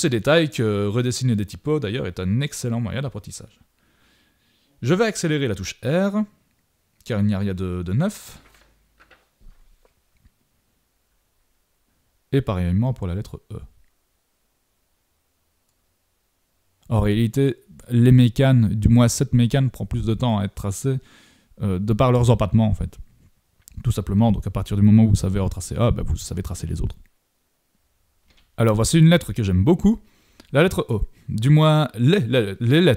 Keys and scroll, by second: 7.1 super+-, 7.9 super+z, 10.1 super+-, 10.4 shift+super+z, 10.6 shift+super+z, 12.0 super+=, 13.9 super+-, 15.9 super+=, 16.2 super+=, 17.1 super+z, 18.3 super+=, 19.0 super+=, 19.3 super+z, 19.6 super+z, 20.2 super+z, 22.9 super+=, 23.4 super+-, 23.7 super+=, 24.1 super+=.